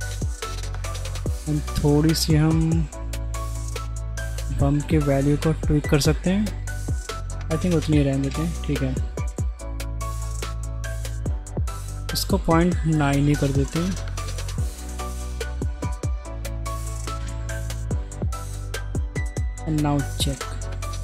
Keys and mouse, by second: 0.0-1.2 middle drag, 3.7-5.2 drag, 7.6 click, 11.3-17.3 drag, 18.3 ctrl+z, 18.9 z, 20.3 click.